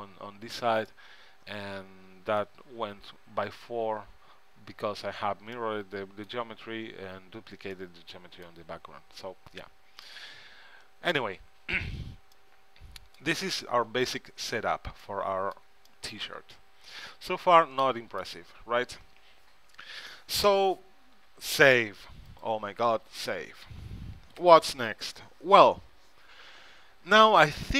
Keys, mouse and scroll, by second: 5.8-8.6 middle drag, 10.1 middle click, 14.1 Tab, 14.4 middle click, 15.7 Tab, 21.8 ctrl+s.